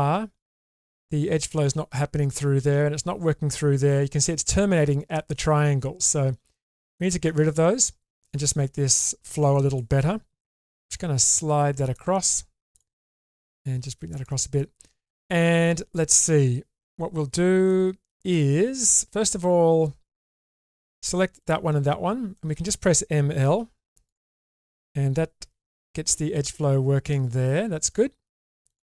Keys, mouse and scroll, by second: 6.5 middle click, 7.4 shift+middle click, 8.3 middle click, 11.0 g, 12.7 click, 13.0 g, 14.6 middle click, 15.4 middle click, 17.7 middle click, 20.6 click, 21.4 shift+click, 22.4 shift+middle click, 23.3 m, 24.0 click, 25.4 ctrl+r, 27.9 middle click, 28.6 click.